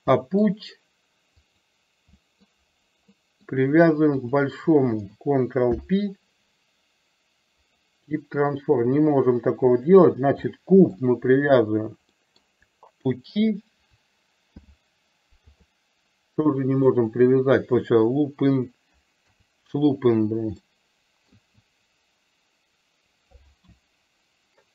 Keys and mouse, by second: 0.2 middle drag, 1.5 click, 2.4 middle drag, 3.1-3.6 middle drag, 4.2 shift+click, 5.9 ctrl+p, 10.0 click, 10.6-11.0 middle drag, 12.2 middle drag, 13.2 shift+click, 14.8 ctrl+p, 16.5-17.0 middle drag, 19.2 KP_3, 20.7-21.3 shift+middle drag.